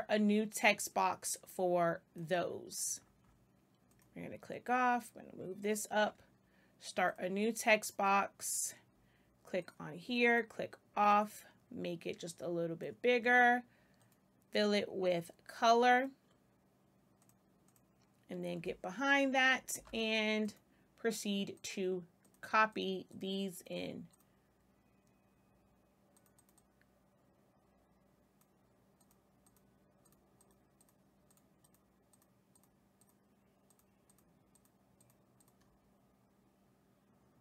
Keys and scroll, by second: 19.7 space.